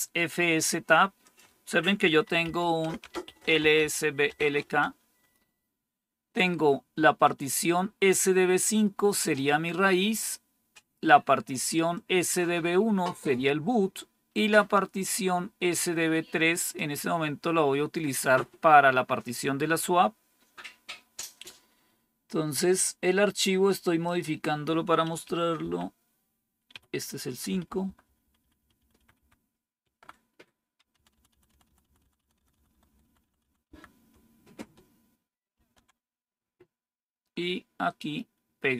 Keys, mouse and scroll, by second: 1.1 click, 2.1-4.6 typing, 10.0 click, 11.8-13.3 drag, 14.9-16.7 drag, 23.9-25.0 drag, 25.1 Up, 25.5 Delete, 26.6 5, 27.4 Up, 27.5 Up, 27.7 Up, 27.9 Up, 28.1 Up, 28.3 Up, 28.5 Up, 28.7 Up, 28.8 Up, 29.1 Up, 29.7 Right, 30.9 shift+Down, 31.0 shift+Down, 31.2 shift+Down, 31.4 shift+Down, 31.6 shift+Down, 31.7 shift+Down, 31.9 shift+Down, 32.1 shift+Down, 32.3 shift+Down, 32.4 shift+Down, 32.6 shift+Down, 32.8 shift+Down, 33.0 shift+Down, 33.1 shift+Down, 33.7 shift+Down, 35.4 ctrl+c, 37.8-38.7 right drag.